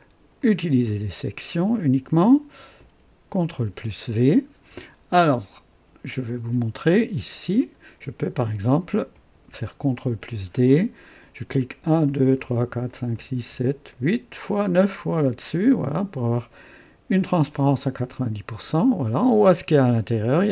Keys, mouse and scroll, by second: 0.3 click, 2.2 click, 3.3 ctrl+v, 6.3 right click, 7.6 click, 9.1 ctrl+d, 11.6 click, 12.2 click, 13.9 click, 14.6 click, 17.2 click, 18.1 click, 18.9 scroll up 1, 19.8-20.5 drag.